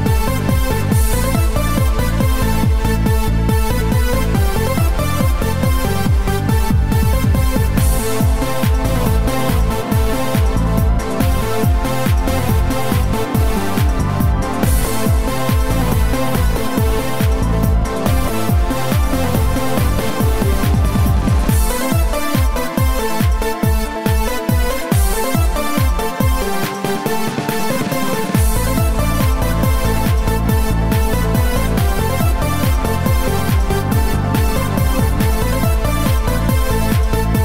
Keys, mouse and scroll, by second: 0.5 KP_5, 0.6 KP_3, 2.9 KP_1, 3.3 KP_2, 3.9 KP_1, 5.4 KP_3, 7.5 click, 9.6-10.1 scroll up 5, 11.9 shift+middle click, 12.9-13.4 scroll up 8, 14.1 shift+middle click, 14.5 shift+middle click, 16.3 click, 17.9 click, 22.2 click, 27.4 click, 31.8 click.